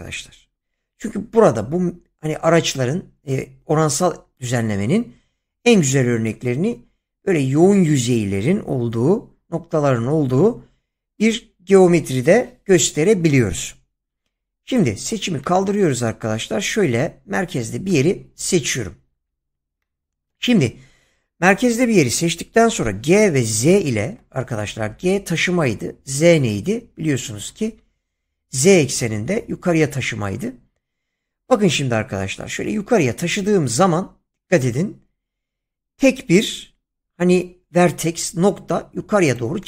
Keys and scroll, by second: 22.7 g, 23.6 z.